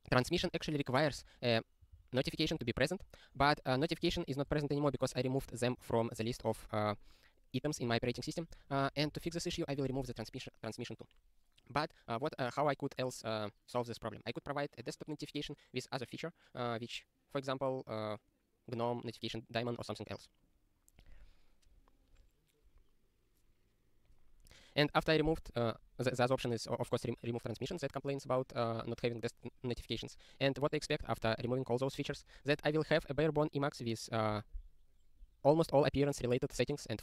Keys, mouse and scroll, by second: 2.6 super+o, 3.5 click, 4.0 ctrl+n, 4.2 ctrl+a, 4.5 ctrl+space, 7.1 ctrl+n, 7.9 ctrl+g, 8.1 ctrl+space, 8.2 ctrl+p, 8.5 ctrl+g, 8.8 ctrl+space, 8.9 ctrl+p, 9.1 alt+;, 9.4 ctrl+s, 9.8 super+r.